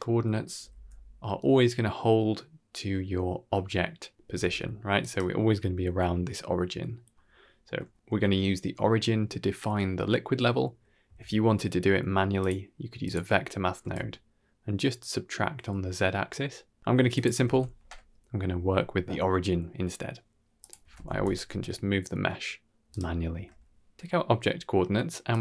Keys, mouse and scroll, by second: 0.4 r, 7.5 middle click, 7.9 KP_1, 10.6 middle click, 10.9 q, 13.8-16.8 shift+drag, 17.1 drag, 17.4 ctrl+z, 17.5 ctrl+x, 18.6-19.0 middle drag, 20.5 click, 20.7 Tab, 20.9 a, 21.1 g, 23.2 Tab, 23.8-25.2 scroll up 5, 25.2-25.4 drag.